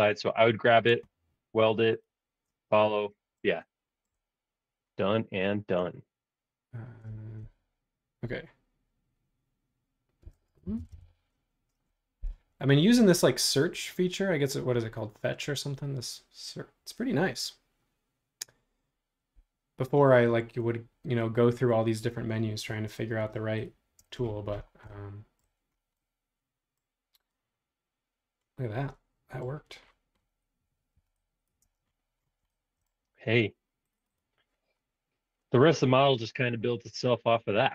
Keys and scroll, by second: 10.0-11.4 typing, 24.0 space, 30.9 e, 31.6 space.